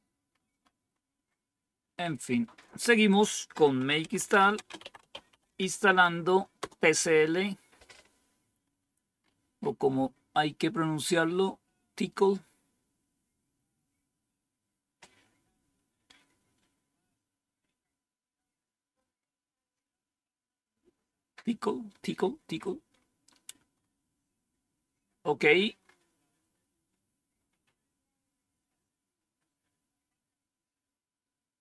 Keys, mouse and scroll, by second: 0.2-1.2 scroll down 1, 3.0 click, 3.5 click, 3.8-5.9 typing, 6.5 Return, 9.1-10.5 scroll up 1, 22.5-25.1 scroll down 4, 25.1-25.8 scroll down 1, 25.8 scroll up 2, 27.0-27.7 scroll up 2, 27.7-28.3 scroll up 1, 28.9 scroll up 2, 30.2-31.0 scroll up 2, 31.0 scroll up 1, 31.2-31.6 scroll down 1.